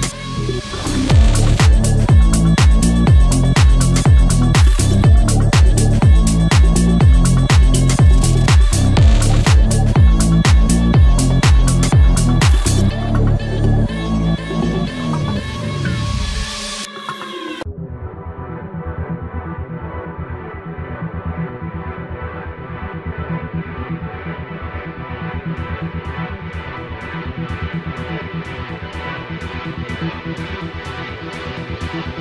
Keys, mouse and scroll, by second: 5.7 scroll up 1, 6.8 click, 7.3 scroll down 1, 8.0-13.7 drag, 16.2 scroll up 1, 17.0 scroll down 1, 18.5 scroll up 1, 19.5 click, 20.1 scroll down 1, 20.6-23.1 drag, 25.3 scroll up 1, 25.7 click.